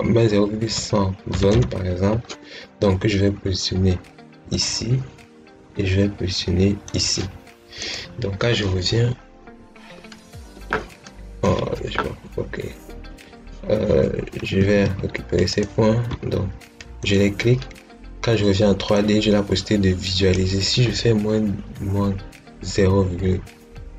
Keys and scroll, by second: 0.5-1.9 typing, 14.3 Escape.